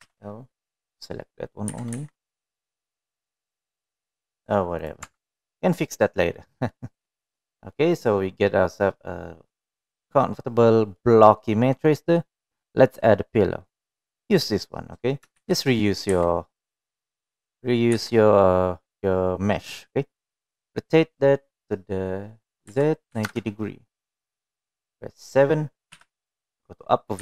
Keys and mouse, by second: 1.5 l, 3.2 g, 6.3 click, 6.6 Tab, 7.5-7.9 middle drag, 8.2-8.5 middle drag, 9.2-11.7 middle drag, 12.5-13.7 middle drag, 14.1-14.5 middle drag, 16.9 shift+d, 19.5 r.